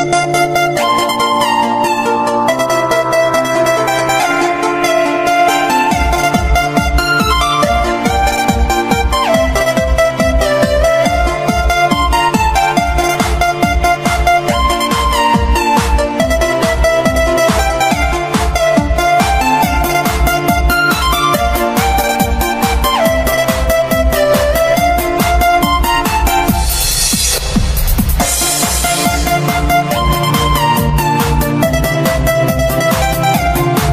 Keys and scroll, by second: 1.5-2.5 typing, 2.7 ctrl+g, 4.1 j, 8.1 v, 10.5 j, 32.2 ctrl+shift+j.